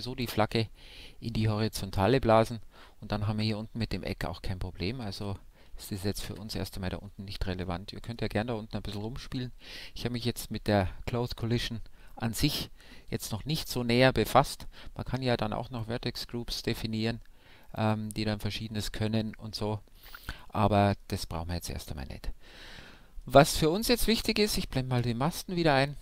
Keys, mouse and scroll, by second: 5.0 alt+a, 6.3 shift+Left, 7.6-9.3 middle drag, 15.6-17.4 drag, 19.3-22.3 middle drag, 22.6-25.0 middle drag, 25.0 alt+h.